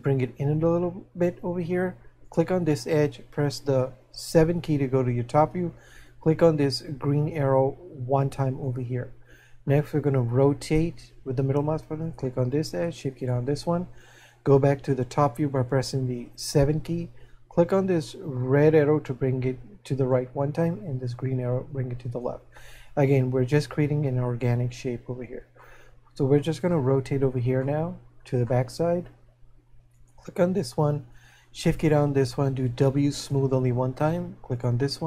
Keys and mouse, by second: 7.8 click, 10.3 middle click, 18.2 click, 21.2 click, 25.8 middle click, 27.2 middle click, 29.9 right click.